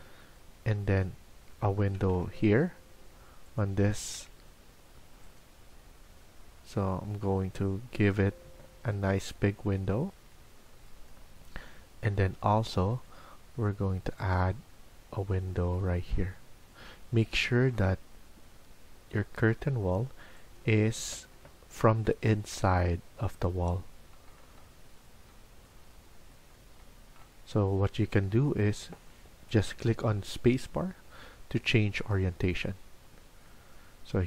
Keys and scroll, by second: 20.8 Escape, 21.2 Escape.